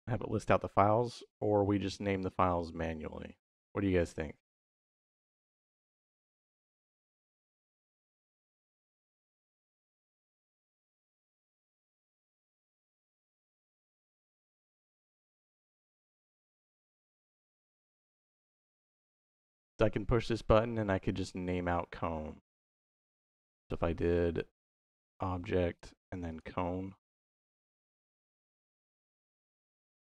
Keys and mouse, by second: 11.7-15.4 middle drag, 19.2 click, 23.2 middle click, 24.2-25.6 drag, 26.1 click, 27.3 click, 28.6 click.